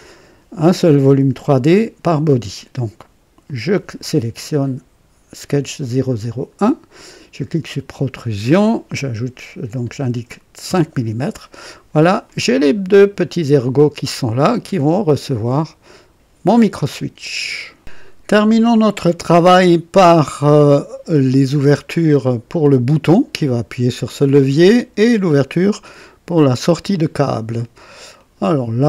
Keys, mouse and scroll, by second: 3.4 click, 7.6 click, 9.9 KP_5, 10.6 KP_Enter, 12.2-14.8 drag, 15.1-16.7 drag, 17.7 click, 19.0 click, 20.7 click, 21.5 click, 22.9 click, 28.1 click.